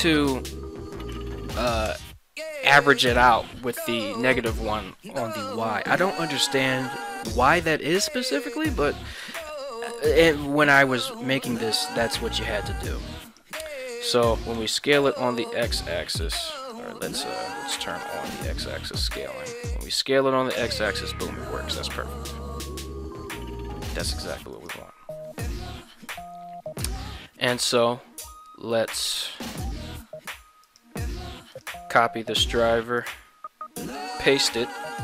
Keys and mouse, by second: 12.3 right click, 13.0 ctrl+Tab, 14.3 s, 14.6 x, 16.6 drag, 18.0 click, 18.9 s, 19.1 x, 24.6 right click, 28.6 ctrl+Tab, 29.5 right click, 30.7-31.6 right drag, 33.0-34.3 right drag.